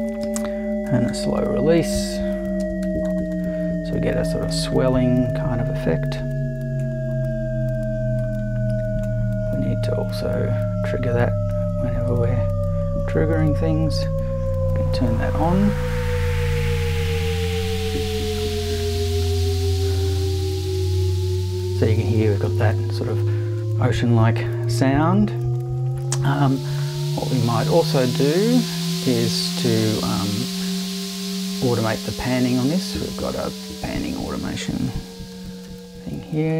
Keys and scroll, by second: 0.0-3.5 typing, 18.8 BackSpace, 35.3 super+c, 35.7 super+v.